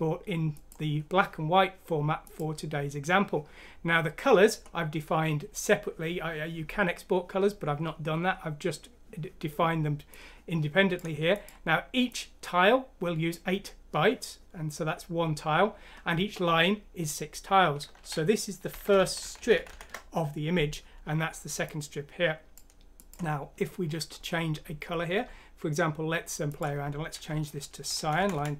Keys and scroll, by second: 18.7 Home, 19.0 Down, 19.2 Down, 19.4 Down, 19.5 Down, 19.7 Down, 28.3-28.5 typing.